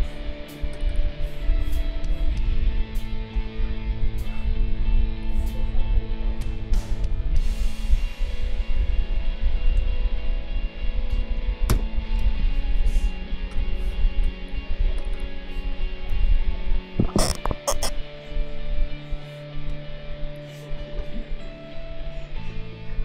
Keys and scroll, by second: 9.8 ctrl+z, 11.7 ctrl+g.